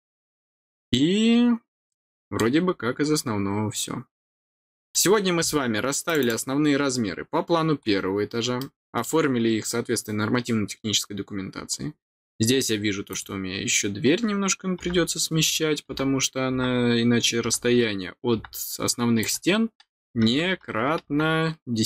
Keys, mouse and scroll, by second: 1.8 middle click, 2.4 scroll down 1, 3.8 scroll down 1, 4.5 middle click, 6.0 click, 6.2 click, 7.8-8.2 scroll down 2, 8.5 middle click, 12.0 scroll down 1, 13.1 click, 19.2 click.